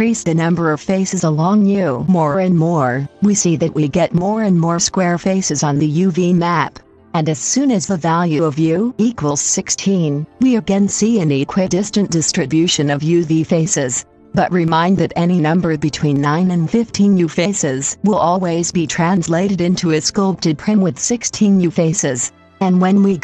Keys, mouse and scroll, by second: 2.1-23.2 drag.